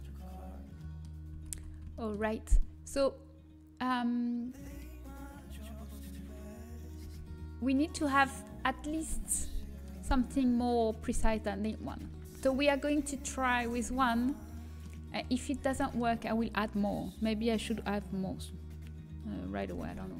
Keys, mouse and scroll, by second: 2.0 Tab, 2.0 a, 2.3-4.1 middle drag, 5.0-5.5 scroll up 1, 5.5 middle click, 5.9-8.0 right drag, 7.0 Tab, 8.0-12.1 middle drag, 12.1 Tab, 13.6-15.7 right drag, 14.5-17.0 middle drag, 15.7 Tab.